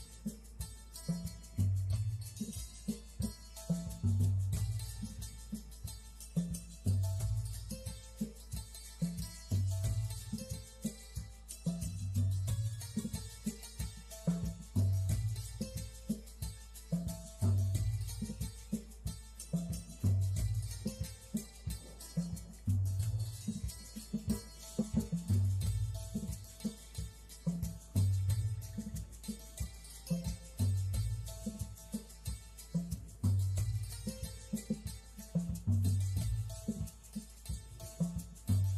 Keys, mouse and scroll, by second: 0.5 click, 0.9 click, 1.2 right click, 1.6 click, 2.1 middle click, 5.8 a, 7.0 click, 8.4 click, 9.1 shift+d, 10.6 click, 14.5 alt+click, 15.5 click, 18.1 click, 19.2 click, 23.2 click, 25.3 click, 27.6 click, 28.7 click, 29.0 click, 30.0 click, 31.0 click, 31.8 click, 34.4 click, 34.7 click, 35.4 click, 37.1-37.5 scroll up 4, 38.3 click.